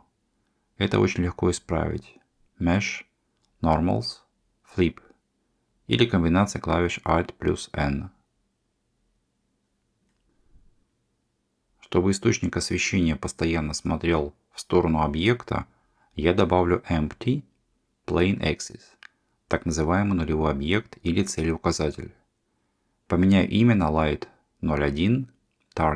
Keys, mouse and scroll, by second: 3.6-5.5 drag, 6.2 middle click, 8.1 alt+n, 10.3-11.9 middle drag, 15.6 Tab, 16.5 shift+a, 23.3-25.9 ctrl+drag.